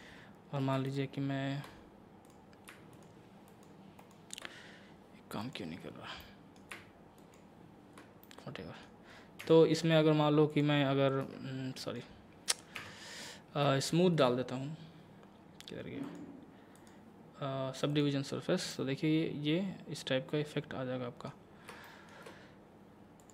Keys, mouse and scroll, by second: 0.9 alt+click, 2.3 click, 5.4 click, 5.8 scroll down 1, 6.2 middle click, 7.2 alt+click, 8.2 middle click, 9.4 Tab, 10.5 click, 11.2 Tab, 11.8 right click, 12.8 Tab, 13.5 scroll up 1, 13.9 shift+middle click, 15.3-16.0 scroll down 1, 16.0 click, 18.7-21.4 middle drag, 21.4 scroll up 1, 21.9 shift+middle click, 23.2 click.